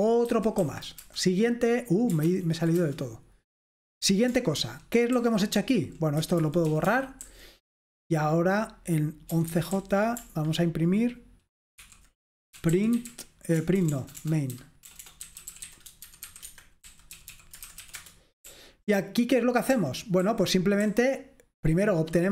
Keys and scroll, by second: 0.0-0.6 typing, 1.1 Return, 2.3 ctrl+p, 2.9 Return, 4.7 ctrl+d, 5.2-7.7 typing, 9.2-9.9 typing, 11.9-20.8 typing, 16.5 Escape.